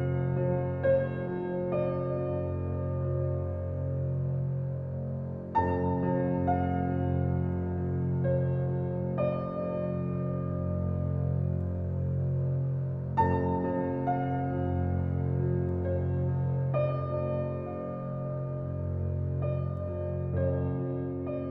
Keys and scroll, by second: 1.0 s, 1.2 t, 1.5 r, 2.0 BackSpace, 3.1 a, 3.5 r.